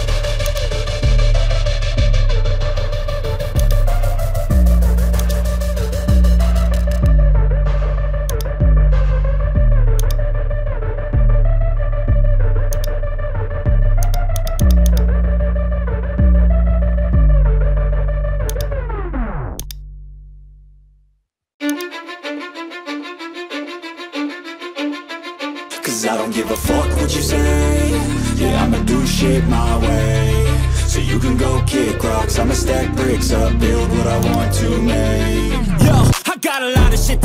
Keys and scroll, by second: 24.6 ctrl+i, 33.5 x.